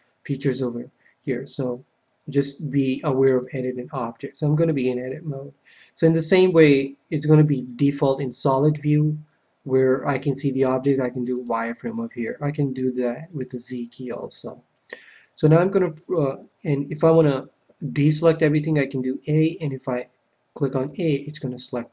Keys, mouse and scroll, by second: 6.6-8.4 drag, 12.7 z, 13.5 z, 18.0 a, 20.8 a.